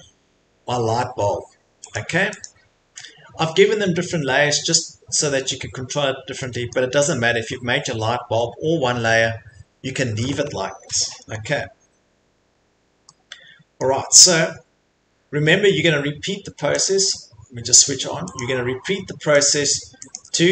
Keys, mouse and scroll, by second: 2.0 click, 2.4 click, 3.3 middle click, 3.7 Escape, 4.1 Escape, 6.0 middle click, 6.1 middle click, 6.7 middle click, 8.4 middle click, 10.7 middle click, 11.3 middle click, 11.4 middle click, 12.5 middle click, 12.8 middle click, 13.8 middle click, 14.4-15.6 scroll, 16.8 click, 18.3 click, 18.9 middle click, 18.9 middle click, 19.0 middle click, 19.4 click, 19.7 click, 20.2 click, 20.2-20.5 scroll.